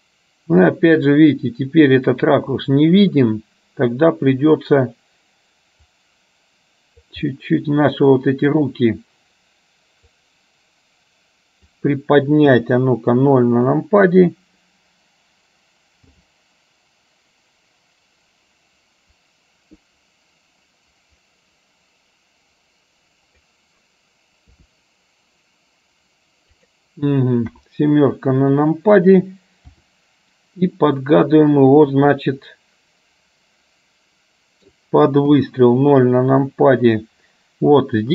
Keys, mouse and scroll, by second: 5.9-7.2 drag, 7.4-8.7 middle drag, 10.2-11.7 drag, 12.6 KP_0, 16.1 g, 24.7 r, 27.6 KP_7, 29.9 r, 32.2-34.7 middle drag, 35.5 KP_0.